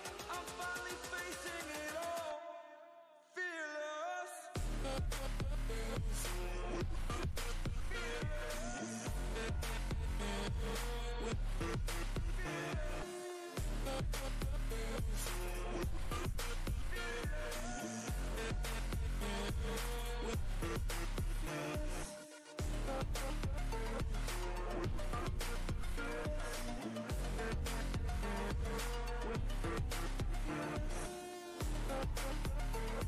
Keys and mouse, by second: 3.9 click, 7.5 ctrl+z, 9.7 click, 15.5-16.1 drag, 22.1-26.5 drag.